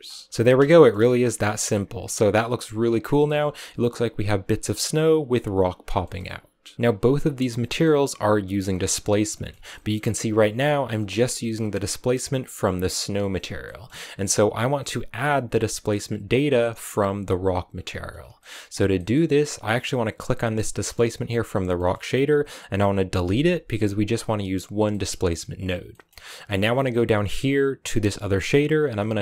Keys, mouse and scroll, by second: 0.2 middle click, 0.3-0.6 scroll up 1, 0.6 shift+middle click, 1.3 right click, 2.2 middle click, 3.1-5.6 scroll up 1, 5.6 scroll up 1, 5.7 scroll down 3, 5.9 middle click, 6.1-6.6 scroll up 1, 6.6 scroll up 1, 6.7-7.7 middle drag, 7.7-8.4 scroll up 1, 8.4 scroll up 1, 8.6-9.1 scroll down 4, 9.1 middle click, 9.9-11.0 scroll up 4, 11.0 click, 11.4-14.1 middle drag, 14.1-15.1 scroll up 4, 15.1-16.4 drag, 17.6-18.3 scroll down 3, 18.3 middle click, 18.7 scroll down 1, 18.8 middle click, 19.7 click, 20.4-23.1 middle drag, 23.1 x, 24.6 scroll down 2, 24.8-29.1 middle drag, 29.1-29.2 drag.